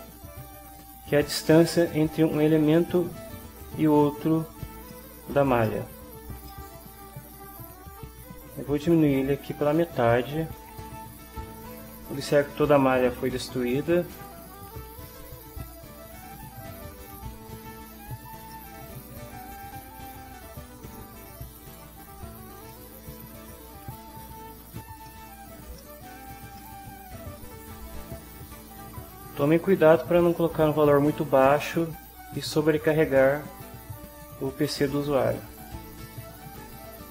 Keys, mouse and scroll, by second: 5.7 ctrl+click, 6.1 ctrl+click, 6.4 ctrl+middle click, 6.5-8.1 ctrl+drag, 9.3 click, 9.8 2, 10.7 Return, 13.8 ctrl+middle click, 14.9-18.4 right drag, 18.9 ctrl+middle click, 19.7-24.3 ctrl+right drag, 25.0 ctrl+scroll down 2, 25.8 ctrl+middle click, 26.6-27.8 ctrl+drag, 34.9 click, 36.9 3.